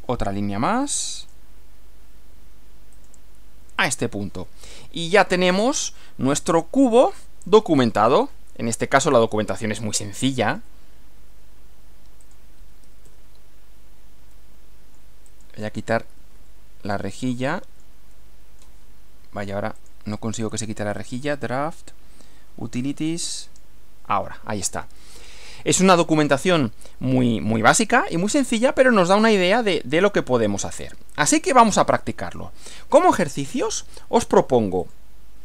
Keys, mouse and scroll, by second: 1.2 click, 2.9 click, 3.9 click, 5.1 click, 5.8 click, 7.0 scroll down 2, 7.5-8.5 middle drag, 8.7-9.5 middle drag, 9.9-10.7 middle drag, 10.9-11.8 typing, 12.3 click, 12.8 g, 13.1 r, 14.3-15.1 middle drag, 15.3 click, 15.8 g, 16.1 r, 17.3 middle click, 18.1 middle click, 19.7 click, 21.0 click, 23.4 click, 24.7 scroll up 1, 25.5-27.4 middle drag, 27.8-33.4 middle drag, 34.8 click.